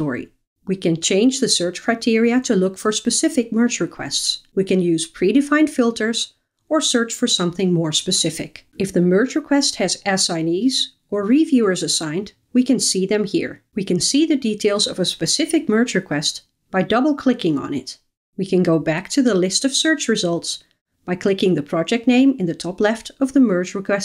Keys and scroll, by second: 8.7 super+a.